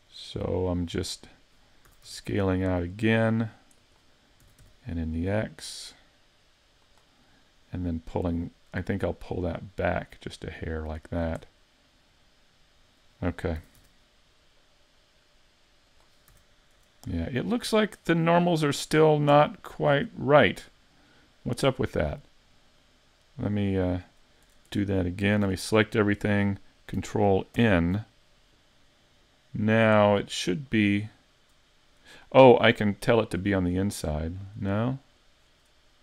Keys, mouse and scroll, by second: 0.1 middle click, 1.9 s, 3.9 click, 4.4 s, 7.0 click, 7.3 middle click, 9.2 click, 11.5 middle click, 13.6 s, 16.0 click, 16.3 a, 17.1 scroll down 3, 17.5 middle click, 19.3 Tab, 19.9 Tab, 22.8 click, 24.7 Tab, 25.4 a, 27.6 ctrl+n, 33.9 click, 35.0 click.